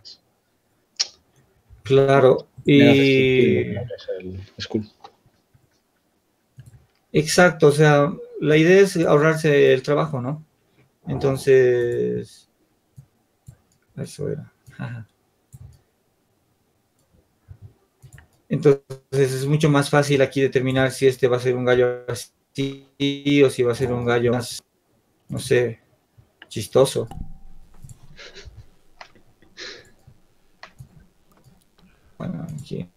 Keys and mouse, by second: 1.3-2.8 drag, 2.1 Tab, 4.3-11.2 drag, 13.8-16.7 drag, 17.6 Tab, 23.1 s, 25.1 s, 28.2 s.